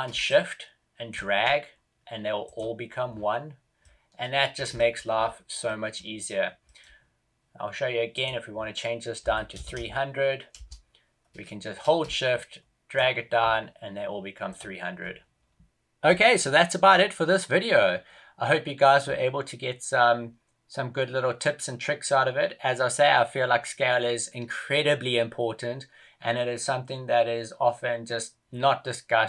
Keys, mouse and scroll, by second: 0.2 shift+click, 3.0 scroll down 8, 3.7 middle click, 4.7 shift+middle click, 5.2-5.5 scroll up 2, 5.5 middle click, 6.3 scroll down 1, 6.5 middle click, 12.2 shift+click, 12.2 shift+KP_0, 14.9-15.3 scroll up 1.